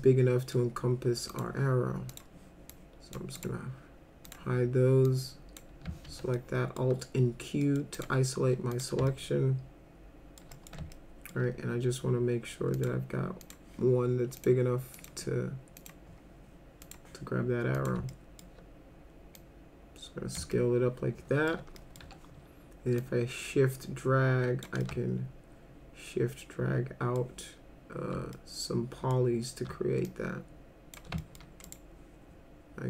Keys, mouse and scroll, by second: 0.0 alt+middle click, 1.3 click, 2.1 click, 2.7-3.2 drag, 3.3 right click, 4.3 click, 5.1 click, 6.1 alt+q, 6.4 alt+middle click, 7.6 middle drag, 7.9 click, 8.7 click, 9.1-10.4 alt+middle drag, 10.5 middle click, 10.9 alt+middle click, 12.8 click, 13.4 click, 14.4 click, 15.0 click, 15.8 click, 16.9 click, 17.8 click, 18.1 alt+middle click, 19.4 click, 20.5 alt+middle click, 21.8 middle click, 22.0 w, 23.0-24.6 shift+drag, 24.8-27.2 alt+middle drag, 28.3 alt+middle click, 30.1 shift+click, 31.2 alt+middle click, 31.7 right click.